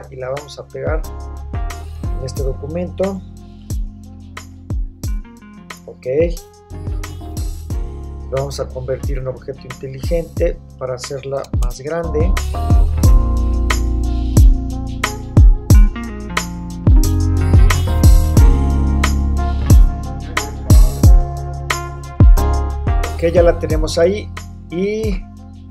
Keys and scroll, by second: 3.4 super+v, 11.6 super+t, 12.3 shift+super+t, 18.7 Return, 21.3 Down.